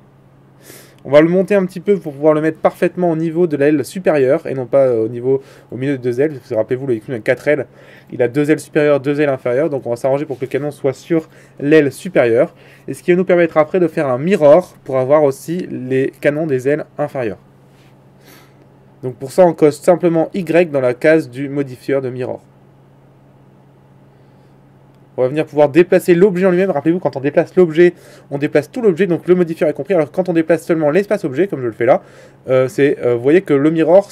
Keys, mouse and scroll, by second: 0.4 a, 1.1 a, 2.6 g, 3.8-5.5 drag, 3.8 middle click, 4.5 middle click, 5.5 g, 7.6-24.2 drag, 24.6 Tab, 26.0 g, 30.7 Tab, 32.1 g, 33.6-34.1 drag.